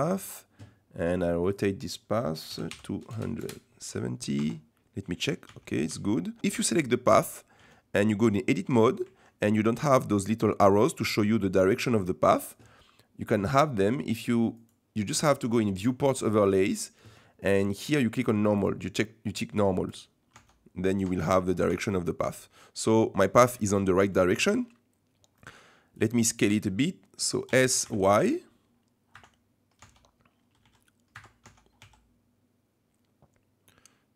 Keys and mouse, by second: 1.4-4.0 drag, 4.4 Tab, 5.5-6.4 Tab, 6.5 Tab, 7.6 Tab, 11.2 shift+click, 14.7-20.3 drag, 20.4 Tab, 21.0 Tab, 21.7 Tab, 23.8 shift+middle click, 25.3 middle click, 26.0-27.5 drag, 27.5 s, 29.8 Tab, 30.6 s, 31.5 Tab, 31.8 s.